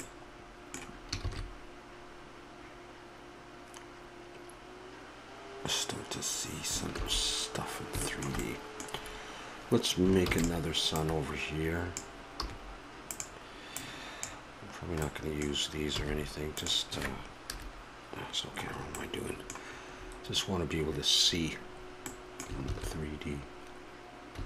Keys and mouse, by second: 3.3 shift+z, 7.0 shift+z, 7.8-10.2 middle drag, 10.3 shift+d, 11.0-12.9 drag, 12.5 r, 13.8-15.1 drag, 15.1 middle click, 15.9 r, 17.5 KP_0, 18.6-21.1 middle drag, 22.8 shift+z.